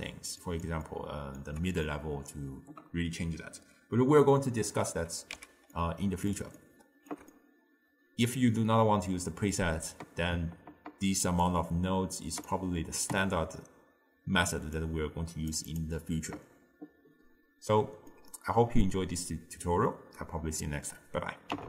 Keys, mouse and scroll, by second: 5.4 x, 5.8-10.4 middle drag, 11.5 click, 14.8-15.9 drag, 18.2-21.3 middle drag.